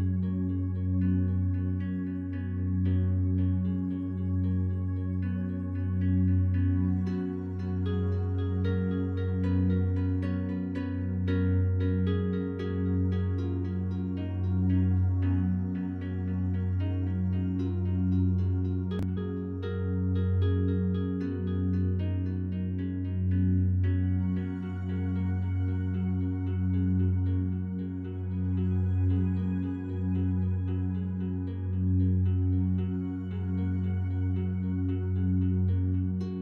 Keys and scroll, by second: 7.8 shift+F5.